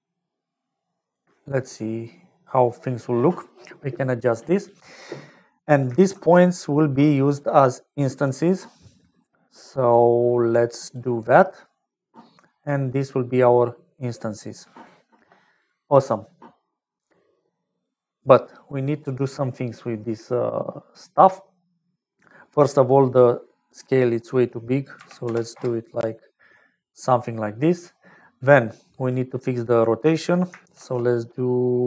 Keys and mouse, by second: 5.6 click, 6.1 shift+a, 11.3 click, 13.1 middle click, 17.8 middle click, 18.1 click, 18.7 click, 20.1 middle click, 23.6-26.2 middle drag, 28.7 click, 29.7 middle click, 30.7 shift+a.